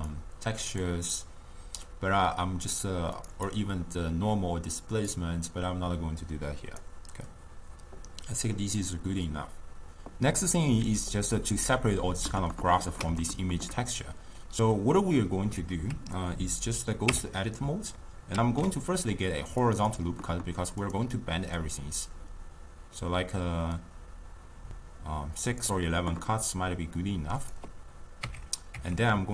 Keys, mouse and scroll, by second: 1.1 drag, 3.4 click, 7.0 click, 12.6-16.4 ctrl+middle drag, 17.1 Tab, 18.4 ctrl+r, 20.9-24.6 drag, 27.4 click, 28.3 Tab, 28.8 Tab.